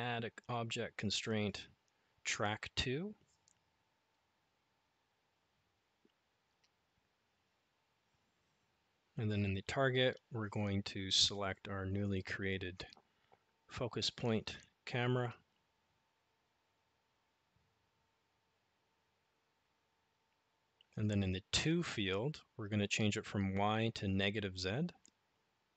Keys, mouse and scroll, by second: 0.0-7.3 drag, 13.9-19.5 drag, 25.5 click.